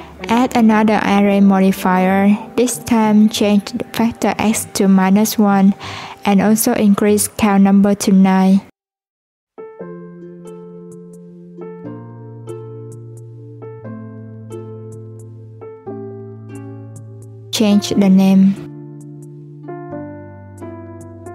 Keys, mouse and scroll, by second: 0.4-3.4 drag, 3.7-5.4 drag, 5.4 scroll up 2, 6.0-7.6 drag, 8.8-10.0 drag, 10.6-11.8 scroll up 1, 11.8-13.8 drag, 16.9 click, 18.2 click, 18.4-21.3 drag.